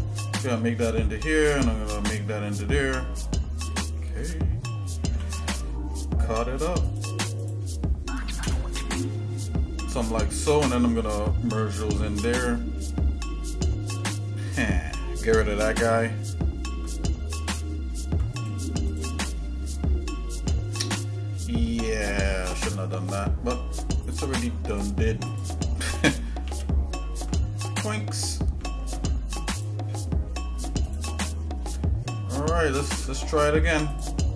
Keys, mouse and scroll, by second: 5.1 k, 18.4 click, 18.8 shift+click, 22.8 ctrl+Tab, 24.7 click, 25.3 click, 26.4 ctrl+x, 28.7 ctrl+Tab, 30.8 click, 33.2 click, 33.9 alt+shift+click.